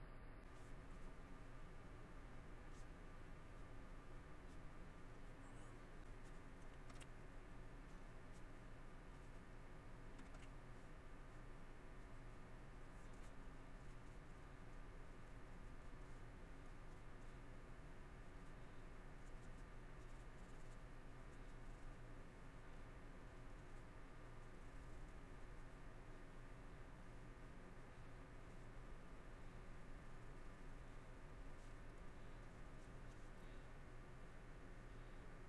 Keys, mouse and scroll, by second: 6.0 middle click, 7.1 middle click, 9.3 middle click, 12.3 middle click, 12.8 middle click, 14.4 middle click, 15.0 middle click, 16.1 middle click, 17.3 middle click, 20.8 middle click, 21.9 middle click, 22.8 middle click, 23.8 middle click, 25.1 middle click, 25.7 middle click, 28.0 middle click, 30.8 middle click, 31.6 middle click, 32.8 middle click, 33.4 scroll, 33.5 middle click, 35.1 middle click.